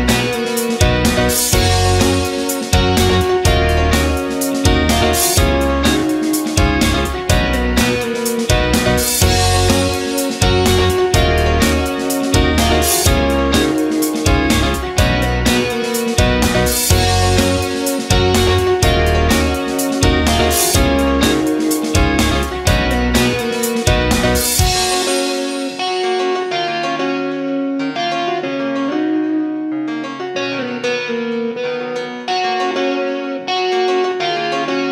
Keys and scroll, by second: 13.1 space, 33.7 ctrl+g.